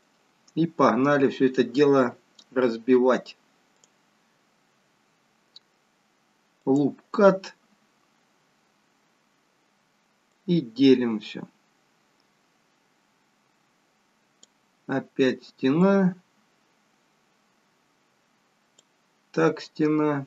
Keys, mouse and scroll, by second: 4.3 click, 7.1 click, 11.2 click, 15.8 click.